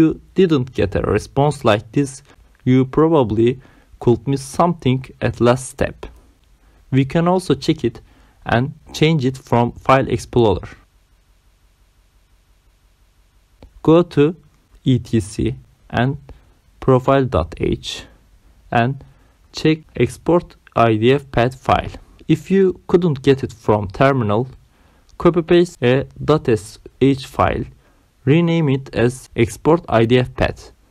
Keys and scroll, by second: 0.8 Return.